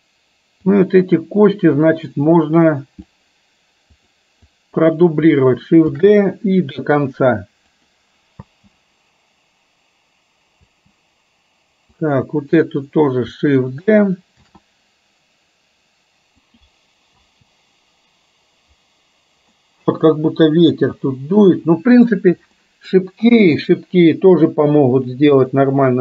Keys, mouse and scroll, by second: 0.7 click, 0.9-3.3 drag, 4.1 click, 4.6-5.3 drag, 6.1 shift+d, 8.6 space, 12.1 click, 12.1 space, 14.7 shift+d, 17.4 space, 19.7-22.3 middle drag, 22.7 middle click, 23.6 KP_1, 25.6 drag.